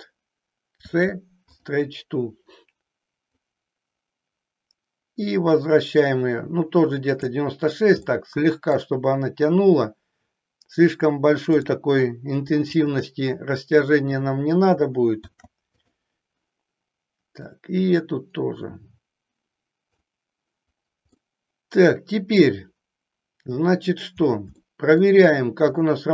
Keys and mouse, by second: 0.6 ctrl+shift+c, 3.5-7.4 drag, 8.0 middle click, 11.4 click, 12.6 shift+click, 15.1 ctrl+shift+c, 17.6-19.9 drag, 21.1-22.4 middle drag, 24.6 shift+middle click, 25.6 click.